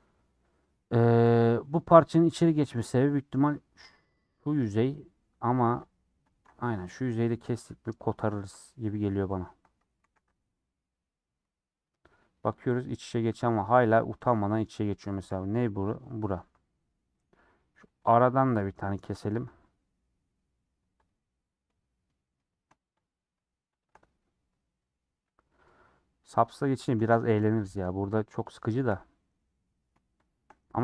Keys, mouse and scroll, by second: 0.0-4.7 middle drag, 4.7 click, 4.9 middle click, 5.8 ctrl+Left, 6.3 ctrl+Left, 6.7-7.9 middle drag, 7.9 click, 8.5 middle click, 9.4 ctrl+click, 10.0 a, 10.2 u, 14.1 click, 14.3 3, 15.2 l, 15.7 middle click, 16.3 scroll up 1, 16.6-17.7 middle drag, 18.1 click, 18.3-19.3 middle drag, 19.3 ctrl+click, 19.7 middle click, 20.4 scroll up 1, 21.0 Left, 21.2-23.0 middle drag, 23.0 shift+click, 23.8 shift+click, 24.1 middle click, 25.1 scroll up 1, 25.3 middle click, 26.3 click, 26.5-28.8 middle drag, 28.8 shift+click, 28.9-30.2 middle drag, 30.2 shift+click, 30.4 middle click.